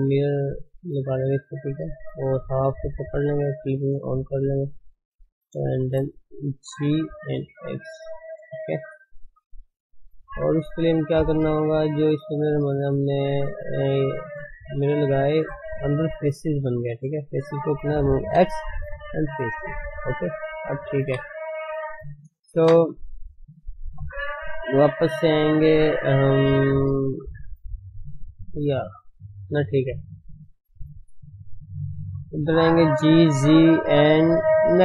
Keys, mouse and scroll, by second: 1.5 click, 1.9 shift+z, 2.7 click, 4.4 click, 5.8 shift+z, 6.9 g, 8.9 g, 10.3 shift+z, 10.6 middle click, 10.9 middle click, 11.0-11.4 scroll up 3, 11.4 shift+z, 11.6 shift+middle click, 12.4 shift+z, 12.6 middle click, 12.8 middle click, 12.9-13.5 scroll up 4, 13.5-13.8 scroll down 3, 13.8 middle click, 14.4 middle click, 15.1-15.6 scroll up 3, 15.6 middle click, 15.9-16.7 scroll down 1, 16.7-17.0 scroll up 1, 17.0-18.4 scroll down 6, 19.1 x, 19.4 middle click, 20.4 middle click, 21.0 KP_1, 21.4 scroll up 1, 21.7 Tab, 22.4 ctrl+space, 22.6 Tab, 22.9 scroll down 3, 23.6 shift+middle click, 24.1 click, 30.1 shift+middle click, 31.4 click, 31.7 shift+middle click, 32.9 g.